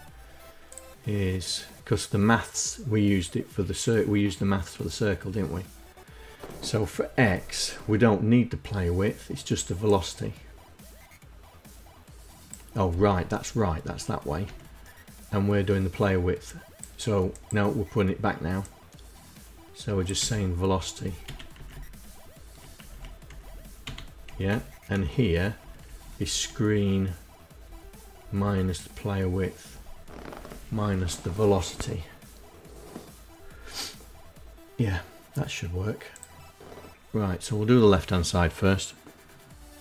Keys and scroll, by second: 13.9 Right, 19.6 Delete, 20.4 Left, 20.7 Delete, 21.0 Right, 21.1 Right, 22.2 Right, 22.7 Left, 22.9 Left, 23.2 Delete, 23.7 Down, 23.9 Down, 24.3 Down, 25.0 Left, 25.2 Right, 25.4 Right, 25.7 Right, 27.1 Left, 27.6 Right, 27.8 Right, 28.1 Right, 29.0 Down, 29.7 Left, 29.9 Left, 30.1 Left, 30.4 Left, 36.4 KP_Enter, 38.4 KP_Enter.